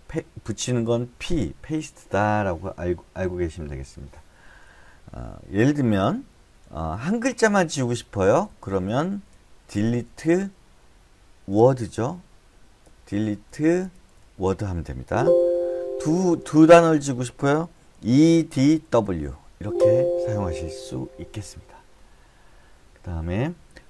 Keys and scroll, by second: 5.7 u, 7.4-7.9 typing, 9.3-13.6 typing, 12.3 Escape, 15.9-19.3 typing, 19.5 Escape.